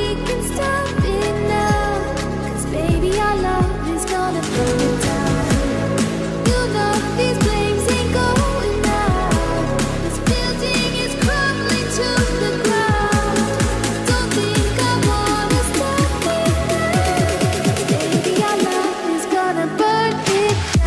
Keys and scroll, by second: 14.6-16.5 typing, 19.8-20.8 typing.